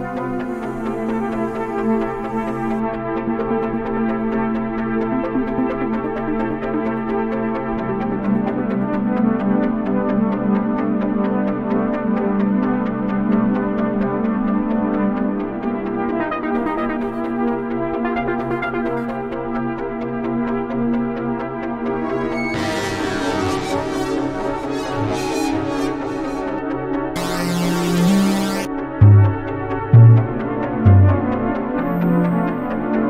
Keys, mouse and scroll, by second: 3.3 click, 5.3 click, 7.0 click, 7.7-10.3 drag, 10.8-12.3 drag, 12.4-13.1 drag, 13.2-14.8 drag, 14.9 click, 15.3-17.8 drag, 24.0-24.4 scroll, 29.7 scroll.